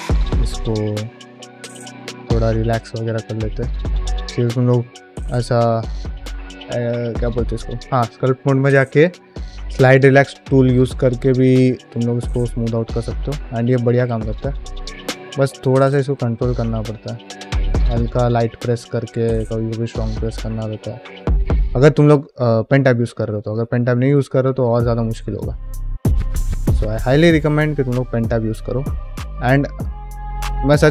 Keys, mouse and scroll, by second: 0.0-1.5 typing, 0.2 click, 0.8 click, 1.3 click, 1.8 middle click, 2.2 ctrl+middle click, 2.4 middle click, 4.1 ctrl+Tab, 10.5 middle click, 10.9 f, 11.3-13.7 shift+drag, 13.9 middle click, 14.4 shift+click, 14.9 shift+middle click, 15.3 middle click, 15.7 shift+click, 16.4 shift+middle click, 16.6 middle click, 17.0-18.6 shift+drag, 18.7 f, 19.0 middle click, 19.2 shift+click, 19.8 shift+middle click, 20.2 shift+click, 20.8 shift+middle click, 21.1 middle click, 21.2 f, 21.6 shift+click, 21.9 shift+click, 22.3 middle click, 22.7 middle click, 23.1 middle click, 23.9 click, 24.7 middle click, 25.2 shift+click, 25.7 middle click, 26.5 ctrl+middle click, 26.8 middle click, 27.6 Tab, 28.0 ctrl+r, 29.9 middle click.